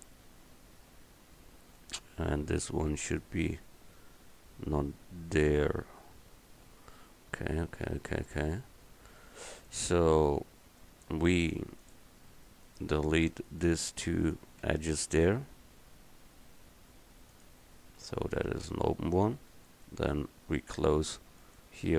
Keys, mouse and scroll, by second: 11.6-13.8 middle drag, 14.7 x, 17.5 middle click.